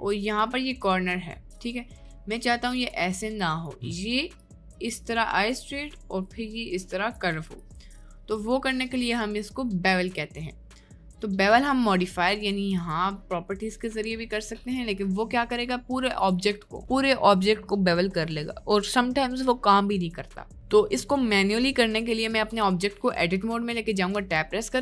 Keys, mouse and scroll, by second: 0.1 click, 0.8 click, 2.9 click, 4.4-7.1 drag, 7.6-11.6 ctrl+drag, 12.8 click, 14.9 click, 15.6 middle click, 16.1 click, 20.9 middle click, 22.3 click, 22.5 Tab.